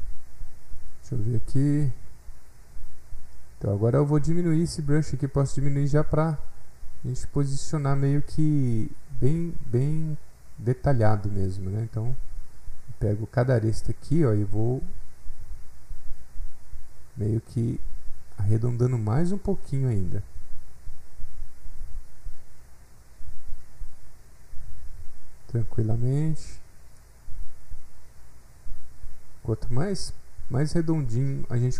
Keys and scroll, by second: 11.1 s.